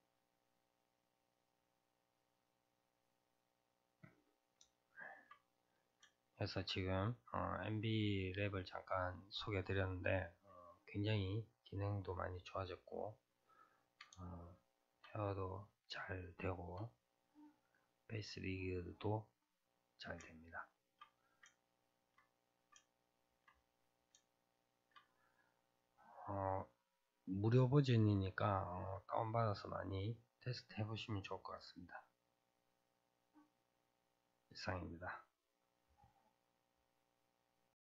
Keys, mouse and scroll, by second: 1.3-4.0 drag, 4.0-5.4 middle drag, 5.4-6.1 scroll up 2, 6.1-6.8 shift+middle drag, 6.8 scroll up 1, 11.9-13.3 scroll down 2, 13.3-14.3 scroll down 3, 14.3-19.2 shift+middle drag, 19.2-19.7 scroll down 2, 19.7-21.1 middle drag, 21.1-21.6 scroll down 2, 21.6-30.9 shift+middle drag, 30.9-31.4 scroll up 2, 31.4-35.4 middle drag.